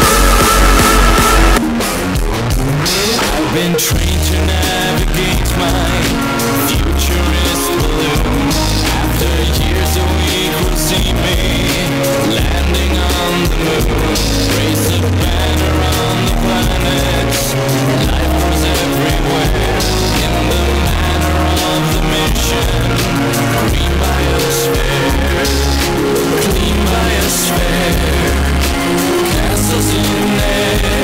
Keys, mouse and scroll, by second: 1.4 Page_Down.